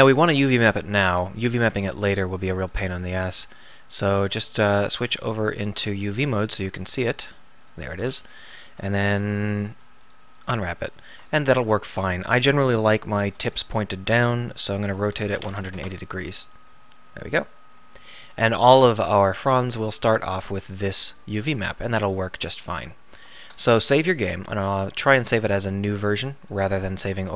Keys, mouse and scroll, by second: 1.0-10.1 middle drag, 13.4 r, 17.8-22.2 middle drag, 22.8 Tab, 26.6 ctrl+shift+s.